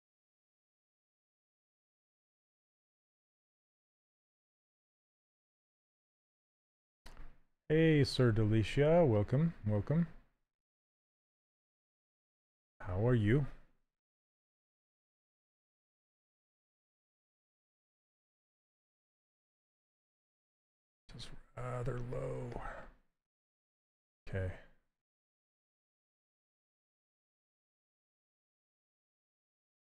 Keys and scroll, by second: 8.0 s, 15.8 s, 17.8 shift+f.